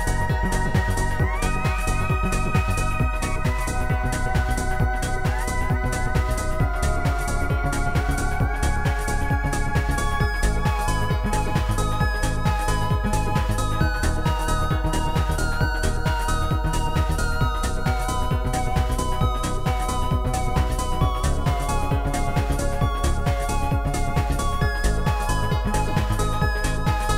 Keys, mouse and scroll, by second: 0.5 click, 1.5 click, 2.2 click, 6.4 click, 6.9 ctrl+z, 9.6 ctrl+z, 9.6 click, 9.9 click, 10.4 ctrl+z, 10.4 click, 13.9 click, 14.7 click, 16.7 click, 17.8 click, 18.5 click, 19.5 click, 21.0 click, 21.4 click, 23.8 shift+click, 24.5 shift+click, 25.3 shift+click, 26.5 shift+click.